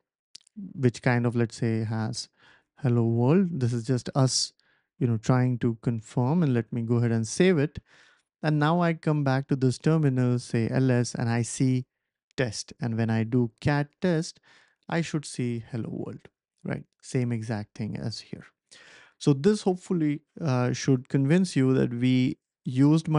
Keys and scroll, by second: 1.4-3.5 typing, 3.8 super+s, 6.3 ctrl+s, 6.4 ctrl+s, 6.5 ctrl+s, 9.5-10.4 typing, 12.6-14.7 typing.